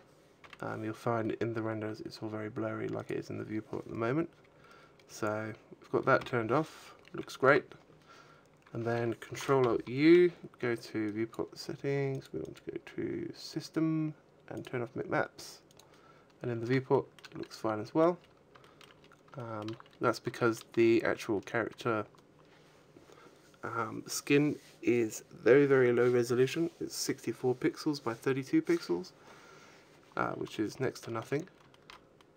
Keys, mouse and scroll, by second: 7.1 F12, 7.1 Escape, 10.5 ctrl+alt+u, 16.2-16.7 scroll up 1, 16.7 shift+middle click, 17.2 middle click, 17.9-18.4 scroll up 5, 18.4 shift+middle click, 19.1-20.0 scroll up 3, 19.2 shift+middle click, 20.2 shift+middle click, 20.8 scroll down 3, 30.1-30.5 scroll up 4, 30.8 shift+middle click, 31.1 a, 31.5 shift+middle click, 31.9 middle click.